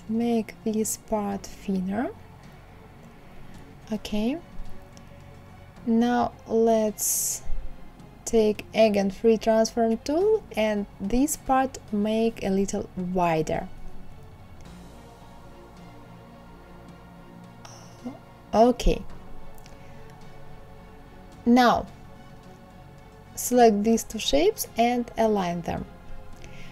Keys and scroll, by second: 16.7 Left, 18.0 Right, 18.9 Down, 19.2 Left.